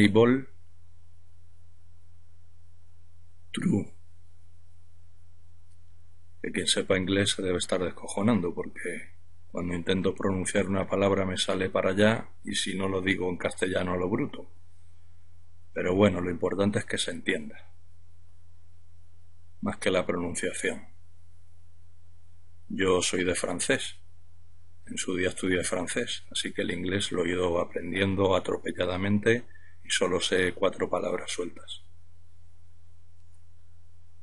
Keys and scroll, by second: 0.0-3.1 typing, 6.2 Return.